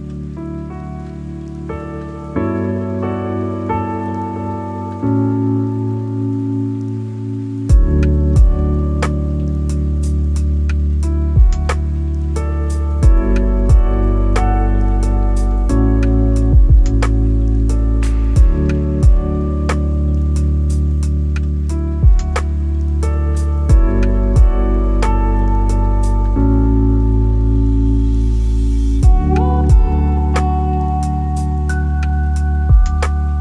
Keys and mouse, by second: 2.4-4.6 middle drag, 5.7-7.6 middle drag, 9.9-11.5 middle drag, 12.3-14.3 middle drag, 18.3-20.2 ctrl+drag, 20.7 click, 24.3 shift+d, 25.4-29.5 drag, 30.6 click, 31.7 click, 32.7 click.